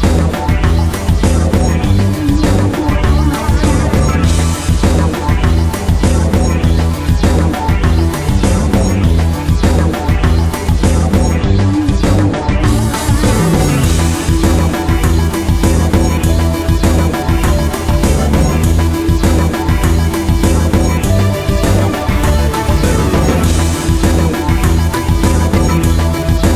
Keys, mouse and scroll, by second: 0.6 shift+right click, 1.6 alt+m, 2.0 click, 2.3 middle click, 2.6-3.6 scroll down 1, 3.6 middle click, 4.8 click, 6.1 right click, 7.1 middle click, 8.6 shift+right click, 9.9 click, 10.7 middle click, 10.9-11.3 scroll down 1, 11.3 middle click, 12.6 right click, 13.0 middle click, 13.6 right click, 14.2 shift+right click, 15.7 shift+right click, 16.0 middle click, 16.8 shift+right click, 17.1 shift+right click, 17.4 shift+right click, 17.7 middle click, 18.4 shift+right click, 19.0 shift+right click, 20.1 middle click, 20.3 scroll down 1, 20.5 shift+middle click, 22.1 click.